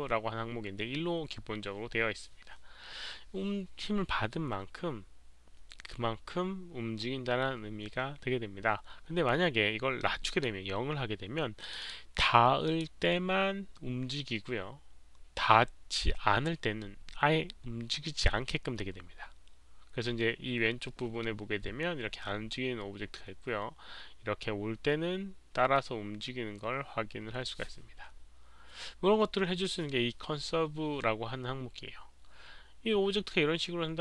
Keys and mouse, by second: 9.9 click, 11.6 click, 11.8 click, 12.6 click, 22.3 click, 22.5 click.